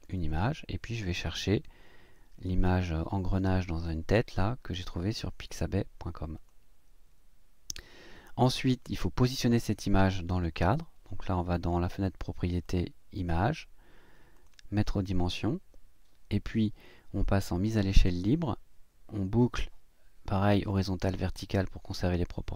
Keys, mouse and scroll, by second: 0.1 click, 1.5 click, 6.4 click, 12.6 click, 14.3 click, 17.5 click, 20.6 click.